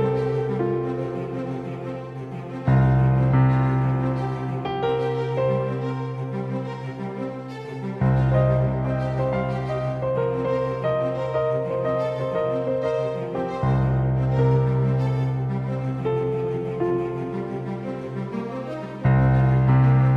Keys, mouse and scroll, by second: 0.4 Tab, 1.6 s, 3.9-10.7 drag, 10.8 KP_1, 13.0-15.3 drag, 16.6 KP_3, 18.2-20.1 middle drag.